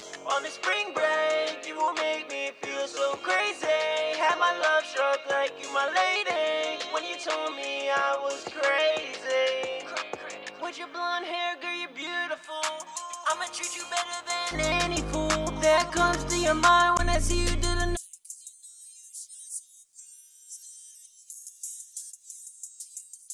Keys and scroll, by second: 20.4 super+Tab, 21.3 super+Tab, 21.8 super+`, 22.9 super+`.